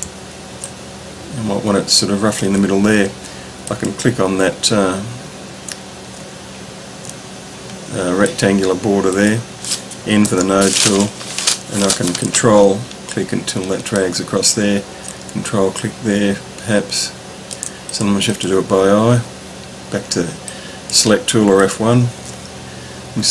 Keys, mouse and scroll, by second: 3.6 click, 6.4-7.6 ctrl+scroll down 3, 8.2 click, 10.2 n, 12.2-14.0 ctrl+drag, 15.2-17.5 ctrl+drag, 17.9 click, 18.3 click, 20.5 click, 21.8 click, 23.0-23.3 ctrl+scroll up 3.